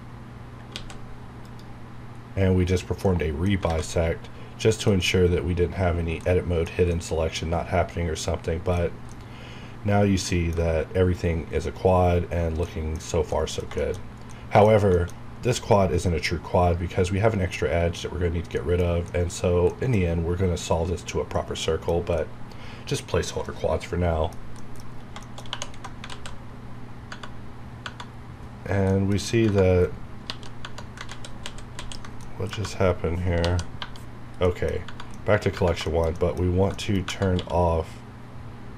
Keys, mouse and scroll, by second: 0.6 alt+x, 1.4 click, 2.2-2.9 scroll up 1, 3.0 middle click, 3.6 alt+a, 3.9 middle click, 5.0-5.9 scroll up 1, 6.2-8.8 middle drag, 8.8 scroll up 1, 9.1-12.3 middle drag, 12.3-12.6 scroll down 1, 12.6 middle click, 13.0 scroll up 1, 13.3 middle click, 14.3 middle click, 15.2 scroll up 1, 18.3 scroll down 1, 18.5 middle click, 21.3 scroll down 1, 21.6-24.6 middle drag, 24.8 scroll up 1, 25.2 shift+middle click, 25.4 scroll up 1, 25.5 2, 26.1 alt+z, 26.3 scroll down 1, 27.1 Tab, 27.6 scroll up 1, 28.5 scroll down 1, 28.9 middle click, 29.2 scroll up 1, 31.0 ctrl+z, 32.2 scroll down 1, 32.5 Tab, 34.4 middle click, 34.7 scroll up 1, 34.8 Tab, 35.1 middle click, 35.8 shift+middle click, 37.3 q.